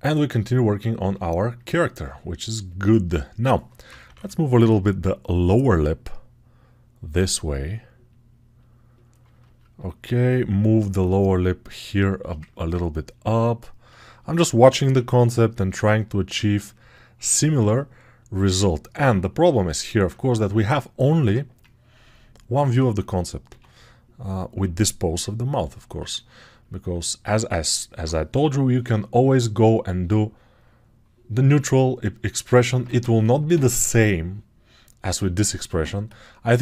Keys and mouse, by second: 2.0 alt+q, 3.3 g, 3.7 ], 3.9 ], 14.7 p, 22.7 ctrl+z, 23.3 x.